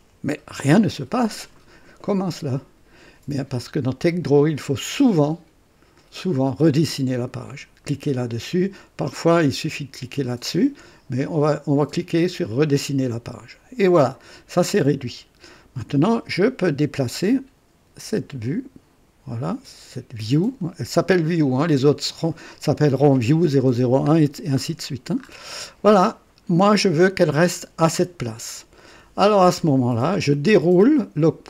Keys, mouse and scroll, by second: 12.5 click, 14.4-14.9 scroll up 1, 17.1-21.7 drag, 24.6-25.6 scroll up 2, 26.4 scroll down 1.